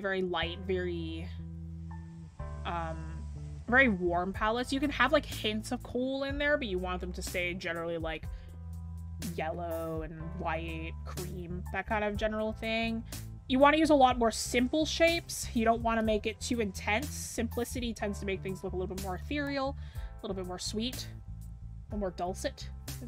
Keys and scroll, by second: 10.8 scroll up 1, 15.3 scroll down 1, 15.9 scroll, 16.5 scroll up 1, 18.0 ctrl+z.